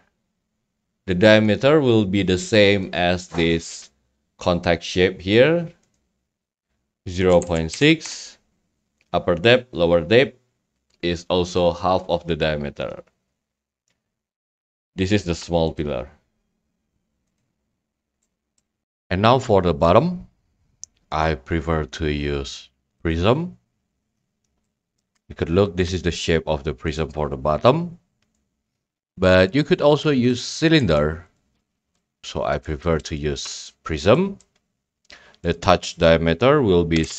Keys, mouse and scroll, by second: 1.4 click, 6.7 click, 13.7-14.4 scroll, 13.7 middle click, 14.4 middle click, 14.5 scroll up 1, 14.7 middle click, 15.8-16.9 drag, 17.4 click, 17.6 middle click, 17.7 scroll up 5, 17.9 scroll, 18.6 right click, 19.9-21.0 drag, 23.0 click, 23.7-24.0 scroll, 24.4 scroll, 25.0 click, 25.0-25.5 scroll, 27.0-28.0 drag, 28.3-29.5 drag, 30.3 click, 30.8 right click, 31.3 click, 31.3 a, 31.9 click, 32.6 click, 33.7 click, 34.6 click, 34.6 scroll, 35.5 click, 35.5 scroll.